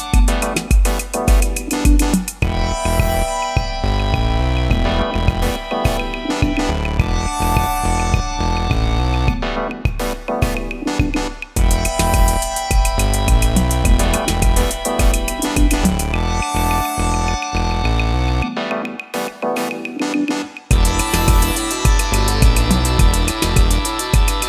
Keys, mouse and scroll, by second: 4.4 e.